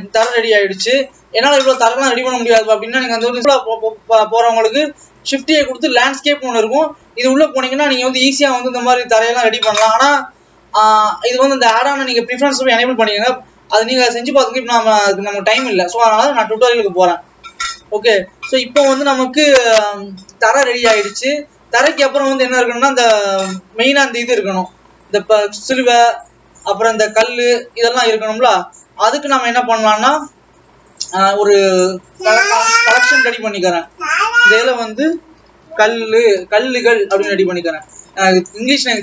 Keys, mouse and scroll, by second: 3.4 click, 4.2-4.9 scroll up 2, 4.9 shift+a, 13.3-13.7 scroll down 1, 13.7-14.3 scroll up 3, 14.3 alt+a, 31.0-31.5 scroll up 3, 31.5 scroll down 3, 31.7-33.0 right drag, 33.0 click, 33.2-36.2 drag, 38.1 ctrl+s, 38.7-39.0 scroll up 3.